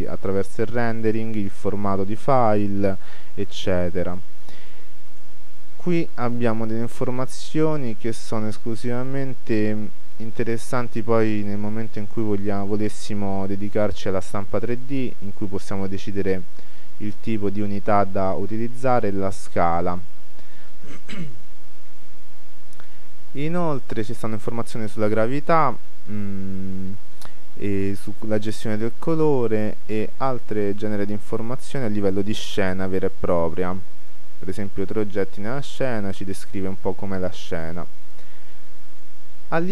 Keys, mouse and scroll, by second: 2.3-10.0 drag, 10.0-12.4 scroll down 1, 22.3-31.4 middle drag, 26.3-26.7 scroll down 1, 32.7 middle click, 34.9 middle click, 38.6-39.7 middle drag.